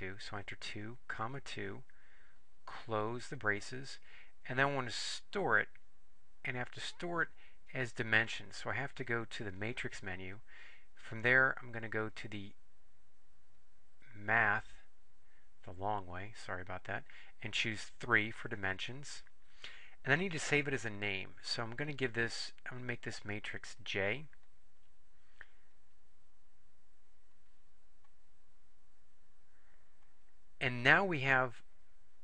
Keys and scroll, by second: 0.0 ,, 1.1 2, 3.3 ), 12.1 Left, 13.7 Left, 18.3 3, 25.9 Up, 28.2 Return, 30.2 Return.